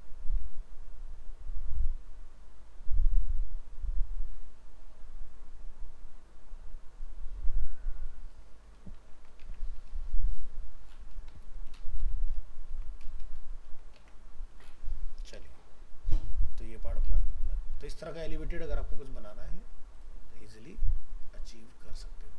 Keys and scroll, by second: 9.1 ctrl+s, 9.4 alt+Tab, 12.7 ctrl+s, 14.0 alt+Tab.